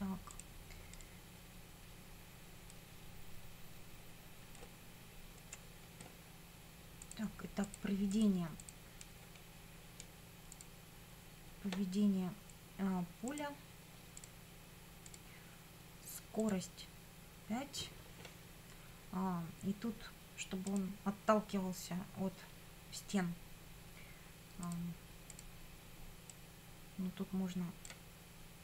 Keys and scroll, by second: 5.5 F9.